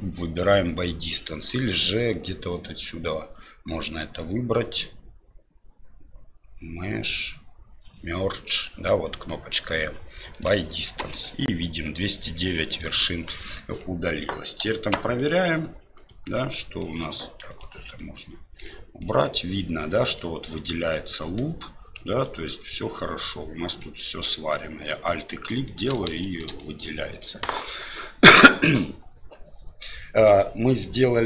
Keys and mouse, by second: 2.1-10.5 drag, 12.7 middle click, 13.7 middle click, 14.6 2, 15.1 right click, 15.9 right click, 16.5 middle click, 17.5 click, 17.9 middle click, 18.6 middle click, 19.7 middle click, 20.6 middle click, 22.1 alt+right click, 22.6 middle click, 23.8 middle click, 25.6 middle click, 26.2 shift+middle click, 26.5 middle click, 30.3 middle click.